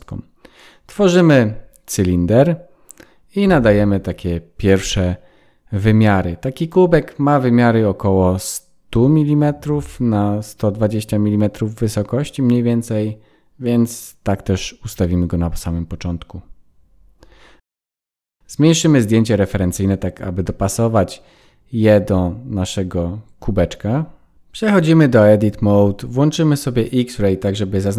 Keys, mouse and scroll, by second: 2.5-4.1 scroll up 2, 4.7 n, 6.4 click, 11.1 click, 13.4 KP_0, 15.8 KP_0, 19.7 click, 20.7 s, 21.8-23.0 scroll up 10, 23.0-23.9 scroll up 4, 23.0 s, 24.1 scroll up 2, 25.4 Tab, 25.4 click.